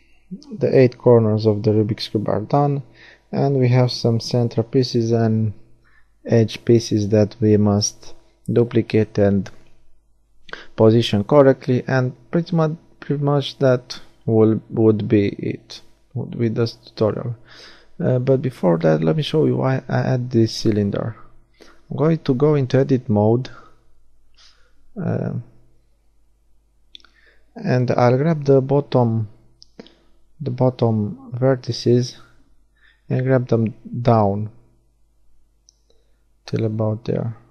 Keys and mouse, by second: 2.3-5.5 drag, 10.6-11.8 middle drag, 12.9-13.9 right drag, 13.9 KP_1, 14.5 Tab, 16.8 z, 17.0 b, 18.1-21.5 drag, 22.9-26.9 middle drag, 28.3-35.8 middle drag, 35.8 shift+d, 36.3 click, 36.3-37.5 right drag.